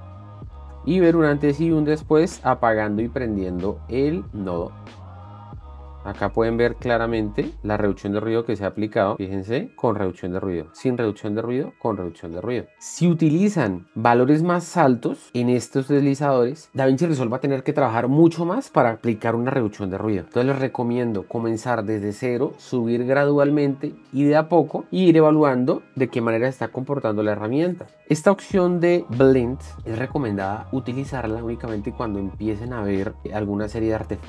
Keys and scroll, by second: 5.5 ctrl+d, 7.6 alt+f, 9.4 shift+d, 10.0 shift+d, 12.3 shift+d.